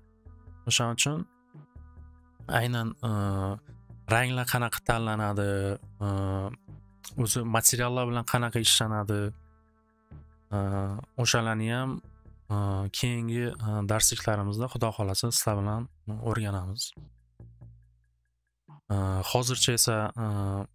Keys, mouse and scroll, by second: 7.4-12.6 drag, 18.3 click.